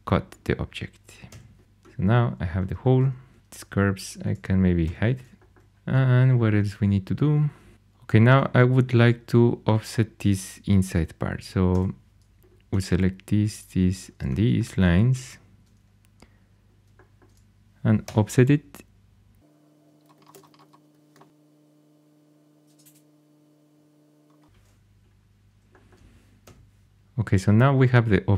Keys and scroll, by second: 1.2 4, 1.6 x, 4.8 h, 11.7 2, 18.0 o, 20.3 Escape, 21.1 o, 26.4 3.